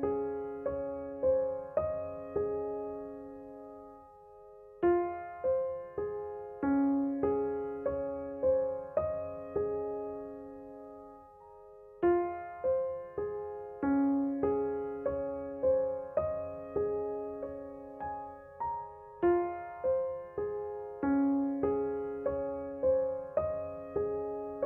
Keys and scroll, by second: 4.1 KP_Subtract.